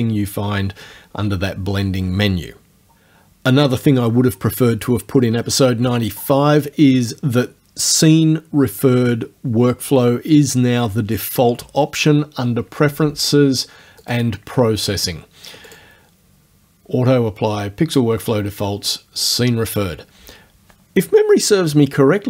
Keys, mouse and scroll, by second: 14.1 click, 15.7 click.